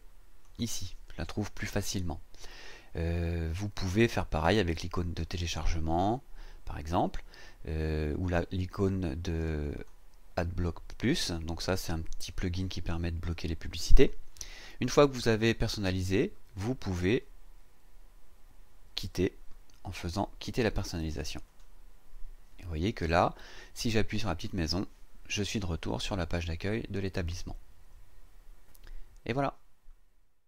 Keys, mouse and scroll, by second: 9.7 click, 21.4 click, 24.4 click.